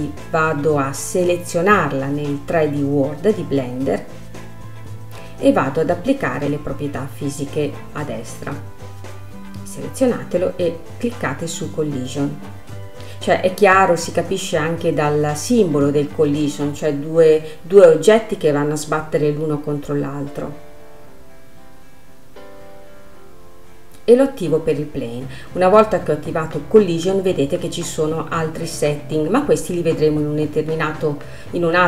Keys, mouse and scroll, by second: 4.0-6.5 scroll up 1, 27.1-28.6 drag, 28.6-29.5 scroll down 2, 29.5-31.8 middle drag.